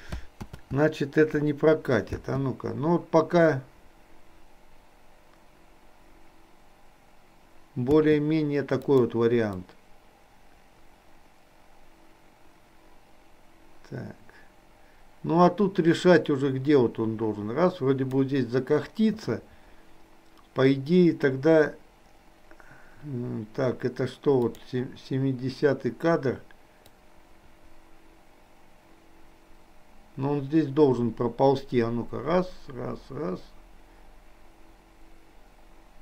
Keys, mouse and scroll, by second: 0.5 ctrl+z, 2.1 space, 8.0 space, 8.9 click, 9.8-18.3 drag, 24.5 click, 27.0-36.0 drag.